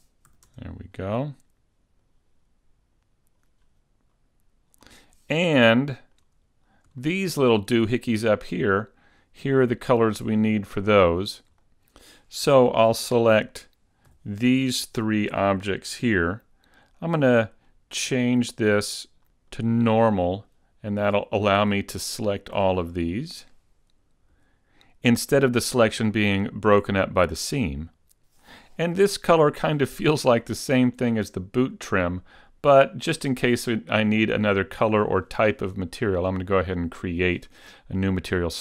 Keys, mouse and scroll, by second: 0.5 a, 0.7 Tab, 1.3-1.6 scroll down 4, 2.1 click, 3.7 scroll down 3, 4.2 scroll up 3, 4.8 scroll down 2, 5.8 shift+middle click, 6.7-7.3 scroll down 2, 7.1 shift+middle click, 7.5-8.0 scroll up 3, 8.0 shift+middle click, 8.8 middle click, 10.1 scroll up 1, 10.5 shift+middle click, 11.3 scroll up 1, 11.7 middle click, 11.7 a, 14.3 l, 17.9 click, 18.6 click, 19.9 click, 21.7 l, 22.7 l, 24.5 l, 33.3 click.